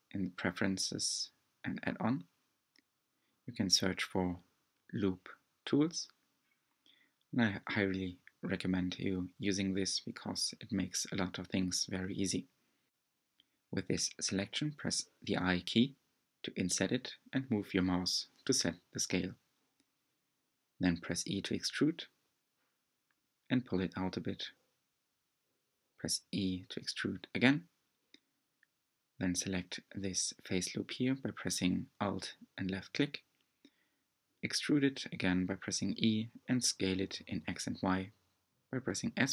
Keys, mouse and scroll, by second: 8.0 scroll down 1, 8.2-9.2 middle drag, 9.2-9.5 scroll up 5, 9.5 middle click, 10.5-10.9 scroll up 3, 10.9-11.5 scroll down 3, 11.5 middle click, 12.1-13.2 scroll down 2, 17.4-18.5 middle drag, 18.5 e, 21.3 middle click, 22.2-22.7 scroll up 1, 22.7 e, 25.4-27.3 shift+middle drag, 27.3 3, 28.7 alt+click, 29.8 e, 31.5 s, 36.1 Tab.